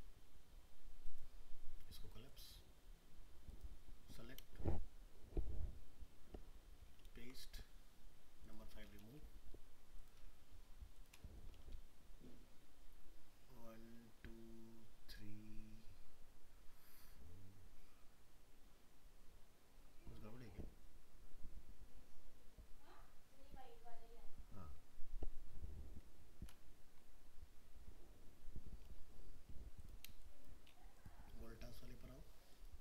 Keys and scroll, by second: 7.1 ctrl+v.